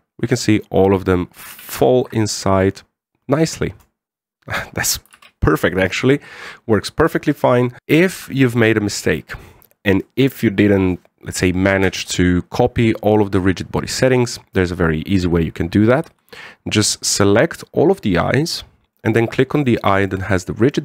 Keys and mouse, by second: 2.4 a, 2.8 shift+middle click, 5.9 alt+a, 8.2-8.6 shift+middle drag, 8.9 z, 9.8 right click, 16.8 c, 18.3-19.7 middle drag, 20.3 shift+right click, 20.7 shift+middle drag.